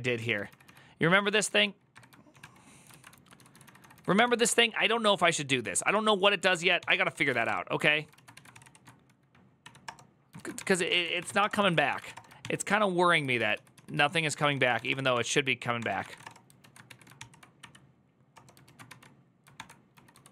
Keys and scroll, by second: 0.0 ctrl+k, 1.2 ctrl+j, 1.7 shift+8, 2.1 ctrl+w, 2.2 ctrl+o, 2.7 ctrl+u, 2.9-8.1 typing, 7.9 ctrl+a, 8.3 ctrl+c, 8.4 ctrl+c, 9.4 Up, 9.6 Return, 10.1-12.2 typing, 12.2 ctrl+t, 13.0 ctrl+u, 13.2 ctrl+u, 13.6 ctrl+u, 14.1 ctrl+u, 14.1 ctrl+d, 14.3-16.7 typing, 16.4 ctrl+a, 16.7 Return, 16.7 ctrl+a, 17.0 ctrl+c, 17.4 Up, 18.1 Return, 18.4-20.3 typing, 19.3 ctrl+d.